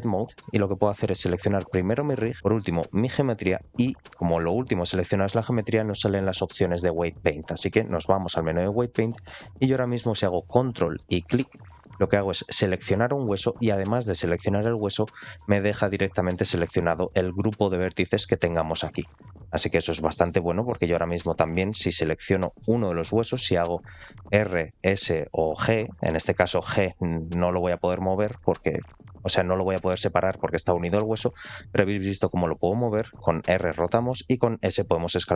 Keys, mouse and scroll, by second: 0.3-0.8 middle drag, 1.5 click, 1.8-2.3 middle drag, 2.5 scroll up 2, 2.8 shift+click, 5.4-8.1 drag, 9.4 middle click, 12.9 ctrl+click, 17.0 scroll up 2, 20.1 middle click, 20.1 scroll up 1, 22.5 ctrl+click, 23.2 middle click, 24.1 r, 25.5 s, 26.5 g, 33.1 r, 34.3 s.